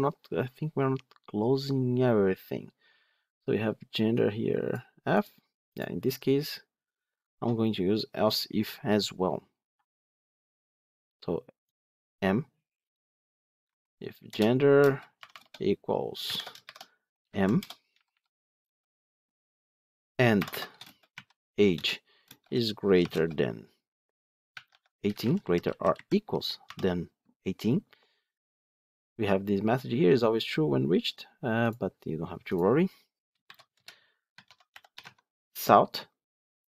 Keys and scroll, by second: 14.2 Return, 21.7 Return, 34.9 Tab.